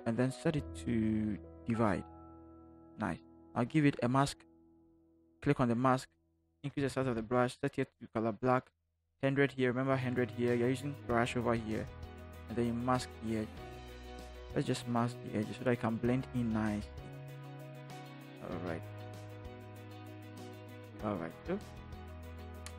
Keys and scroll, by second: 6.7 ], 6.8 ], 13.8 [, 17.1 ].